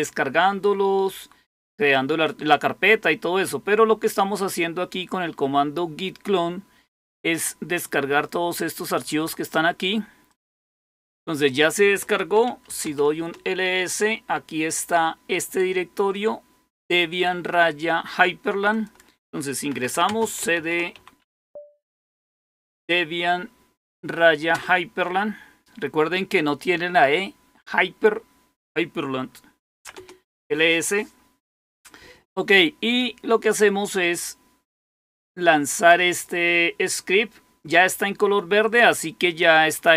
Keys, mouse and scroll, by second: 10.2 click, 11.4 click, 12.5-13.2 typing, 16.1-18.2 drag, 18.6 click, 19.6-20.8 typing, 21.1 Tab, 21.9-22.3 typing, 22.3 Tab, 24.4 Return, 24.4 typing, 29.4-30.2 typing, 34.0-36.2 drag, 37.5 click, 39.2 click.